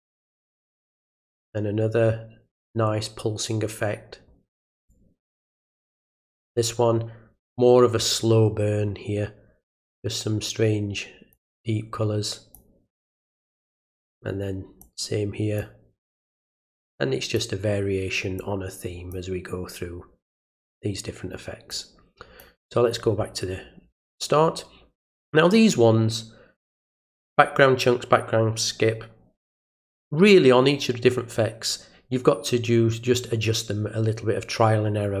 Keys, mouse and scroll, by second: 4.8 click, 11.3-12.5 drag, 14.8 click, 16.7 click, 18.4 click, 21.7 click.